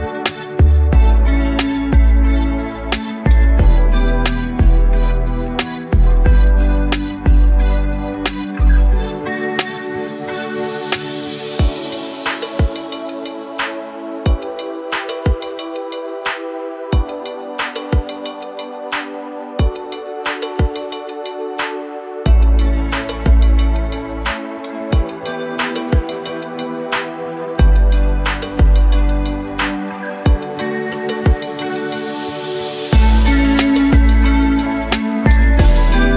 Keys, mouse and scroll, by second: 0.2-3.6 drag, 4.1 click, 7.5 click, 12.0-13.5 drag, 14.5 click, 17.5 scroll up 2, 18.0 alt+click, 18.3 scroll up 2, 18.6 alt+middle click, 18.9 scroll down 1, 19.1 alt+click, 19.5 scroll down 2, 19.7 alt+middle click, 21.2 scroll up 2, 22.4 click, 23.2 click, 23.9 click, 26.4 scroll up 2, 26.7 alt+click, 27.0 scroll up 2, 27.4 alt+middle click, 27.6 scroll up 2, 27.9 alt+click, 28.2 scroll up 2, 28.5 alt+middle click, 28.8 alt+click, 30.0-31.2 shift+right drag, 32.2 shift+click, 32.8 shift+click, 33.6-36.1 drag.